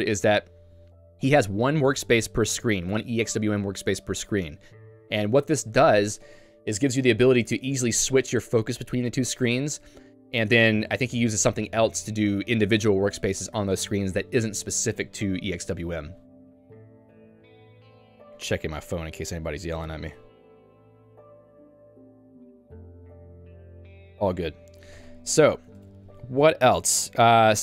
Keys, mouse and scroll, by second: 25.8 Escape, 26.1 j.